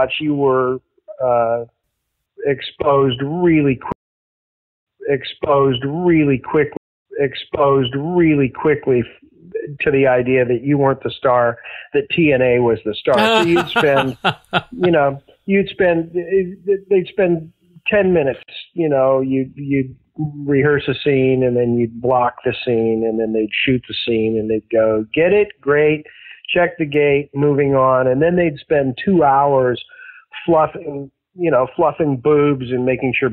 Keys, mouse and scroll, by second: 0.6 click, 1.2 click, 2.7 click, 3.5 click, 3.8 space, 4.2 click, 4.2 space, 4.7 click, 4.8 space, 6.7 space, 6.9 click, 6.9 space, 12.3-14.3 drag, 14.7 click, 16.4-17.5 drag, 18.3 Delete, 20.1 click, 20.8 click, 21.5 ctrl+s, 22.6-24.5 drag, 24.9 click, 25.6 click, 26.8 click, 27.5 click, 28.6 click.